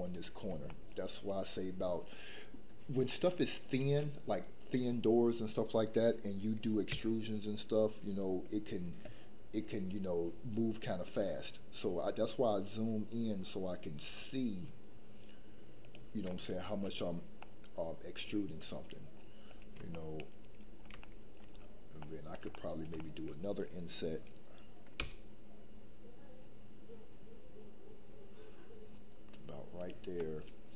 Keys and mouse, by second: 0.7 shift+middle click, 3.2 middle click, 6.9 e, 16.3 middle click, 17.4-19.0 middle drag, 19.9 shift+middle click, 21.0 shift+middle click, 22.1 middle click, 22.7 shift+middle click, 23.0 middle click, 30.2 middle click.